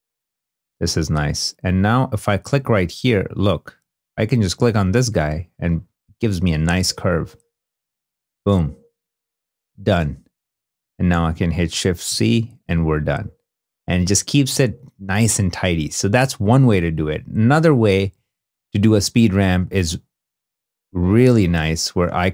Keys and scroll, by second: 6.5 space, 9.8 space, 10.4 shift+space, 11.1 shift+c, 12.0 shift+i, 14.6 i, 18.1 2.